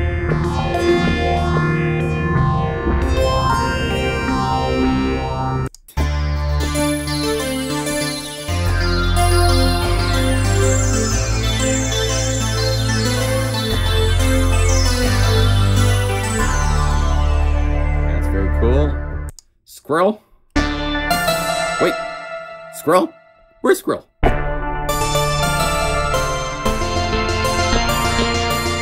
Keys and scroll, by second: 0.3 F3, 0.7 F4, 0.8 F3, 1.3 F3, 1.9 F3, 8.4 F2, 8.6 F1, 8.7 F3, 9.1 F4, 9.2 F3, 9.6 F3, 9.9 F3, 13.6 F1, 15.5-16.9 typing, 20.2-21.0 typing, 21.2 F4, 25.4 F4, 26.8 F3, 27.3 F3, 27.5 F3, 28.0 F3, 28.3 F3, 28.6 F3.